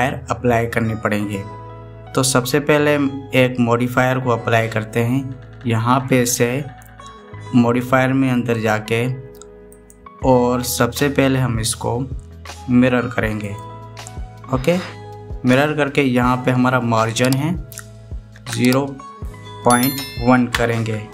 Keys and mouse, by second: 9.3 click, 10.5-14.4 drag, 18.0-21.1 drag.